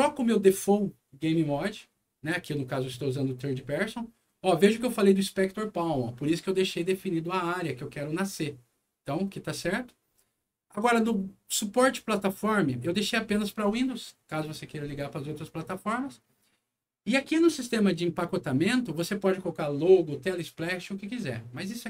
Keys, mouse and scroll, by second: 11.5 click.